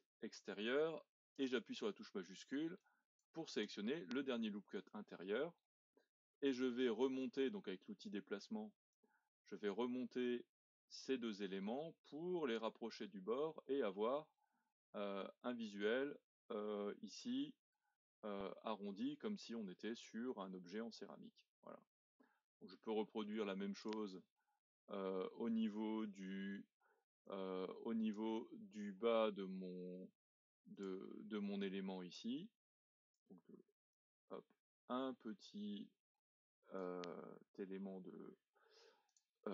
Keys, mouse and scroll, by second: 2.8 alt+shift+click, 5.2-8.9 middle drag, 8.9 click, 13.1-13.7 scroll up 4, 13.7 middle click, 14.7-15.1 scroll down 1, 15.1-18.0 middle drag, 18.0-18.7 scroll down 3, 18.7-20.8 middle drag, 20.8-21.3 scroll down 2, 21.3-23.8 middle drag, 23.8-26.8 drag, 27.2 click, 29.0-30.8 middle drag, 30.8 click, 32.1 click, 33.9 click, 39.1-39.5 drag.